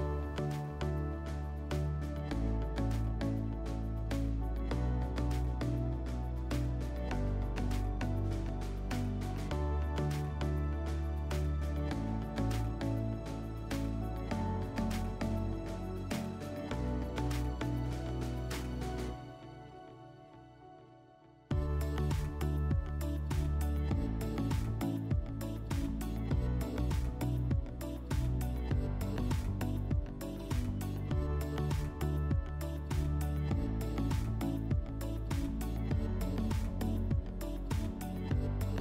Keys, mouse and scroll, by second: 3.6 click, 3.8 click, 5.1 click, 9.2 click, 18.6 click, 24.4 click, 28.6 click, 33.5 click, 34.0 click, 34.9 Delete, 36.4 click, 36.9 click, 37.6 click, 37.9 Delete.